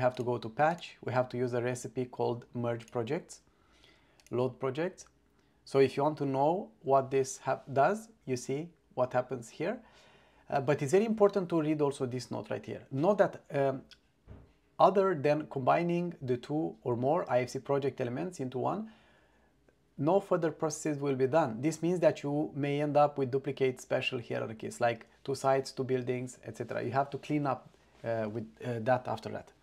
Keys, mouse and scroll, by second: 0.2 click, 0.8-3.0 drag, 4.3 click.